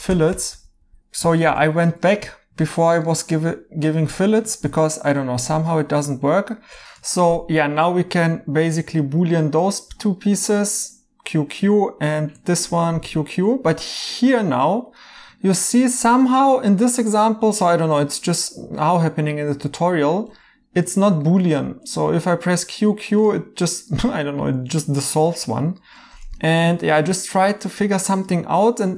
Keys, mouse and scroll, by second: 2.7 right click, 7.1 right click, 9.5 q, 9.7 q, 12.8 q, 12.9 q, 16.0 right click, 18.3 right click, 20.2 q, 20.9 right click, 21.8 q, 24.0 right click, 25.4 ctrl+z, 25.8 right click.